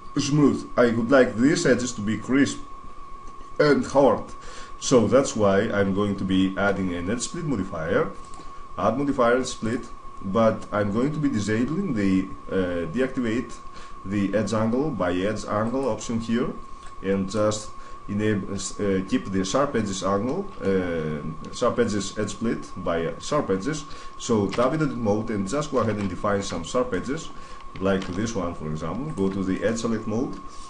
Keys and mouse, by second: 4.4-6.2 middle drag, 8.0-9.8 drag, 10.0-14.4 middle drag, 15.4-18.5 drag, 20.0 click, 20.1 middle click, 20.2 click, 23.5 middle click, 24.4 Tab, 24.6 middle click, 25.6 shift+space, 27.8 ctrl+Tab, 29.3 click, 29.5 click.